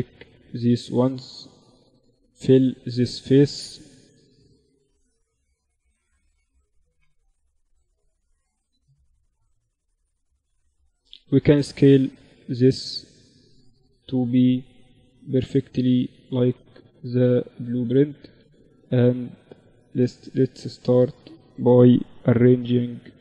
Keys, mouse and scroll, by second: 3.0 f, 3.5 z, 4.1 z, 6.4 f, 7.8 g, 10.1 s, 12.8-14.7 right drag, 13.7 s, 15.1 z, 15.9 z, 16.1 z, 17.3 a, 17.5-19.3 drag, 18.6 g, 19.5 z, 20.1 a, 21.2 g.